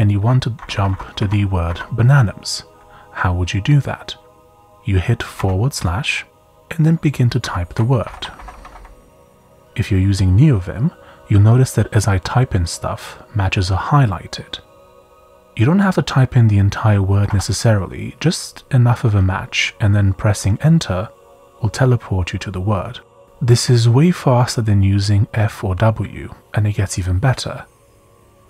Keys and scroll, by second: 0.0-0.1 typing, 4.2 typing, 5.4 typing, 7.2-9.6 typing, 17.0-17.8 typing, 19.3 typing.